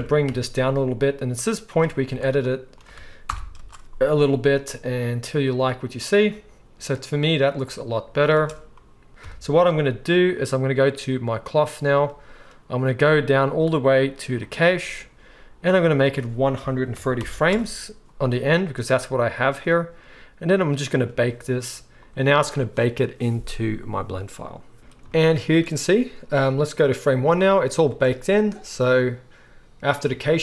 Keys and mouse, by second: 2.1 Tab, 3.2 shift+Left, 3.6 space, 6.1-11.9 middle drag, 8.6 space, 9.2 KP_1, 11.9 click, 12.0-14.4 middle drag, 14.4-30.4 drag, 27.9 space.